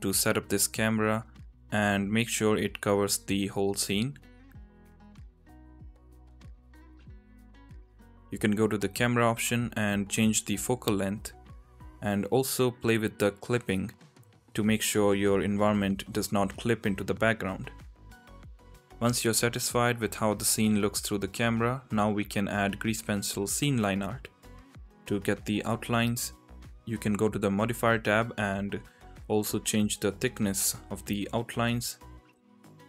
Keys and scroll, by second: 1.9 n, 13.2 KP_0, 13.3 KP_0, 14.9 n, 15.8 n, 17.2 n, 17.9 n, 21.8 shift+a.